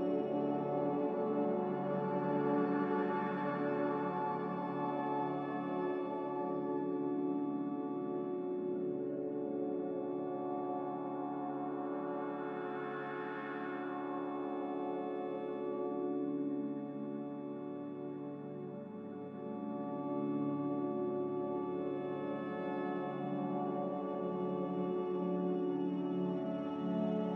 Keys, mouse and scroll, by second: 3.5 click, 4.3 z, 20.4 b.